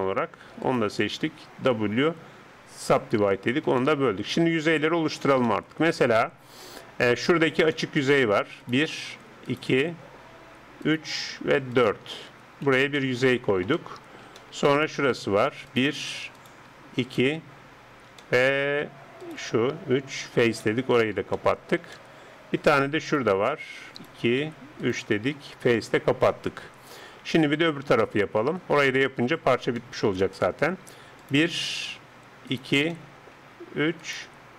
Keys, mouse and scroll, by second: 2.2 w, 3.8-12.6 middle drag, 8.6-13.4 right drag, 12.8 f, 13.0-15.2 middle drag, 13.4 right click, 15.7-18.7 right drag, 18.2 middle click, 19.2 right click, 20.2 f, 21.0-23.8 middle drag, 23.0 right click, 23.8-26.3 right drag, 25.7 f, 26.3-34.5 middle drag.